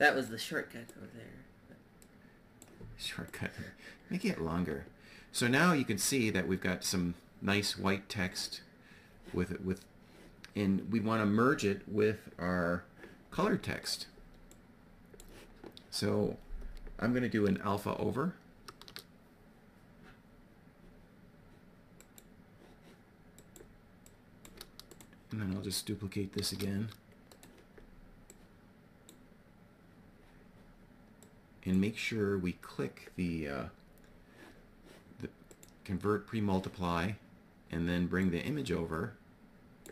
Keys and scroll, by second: 18.1 shift+a, 25.9 shift+d.